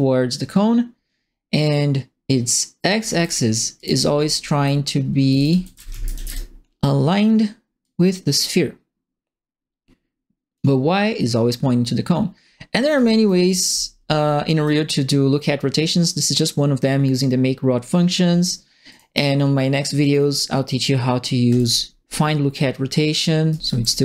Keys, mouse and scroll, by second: 2.8 right click, 3.0 e, 3.7 right click, 4.1-6.3 right drag, 4.1-6.6 typing, 7.8-10.5 drag, 12.8-14.6 right drag, 12.9 a, 13.4 q, 18.8 click, 20.0 click, 21.5 click, 23.2-24.0 typing, 23.5 right click.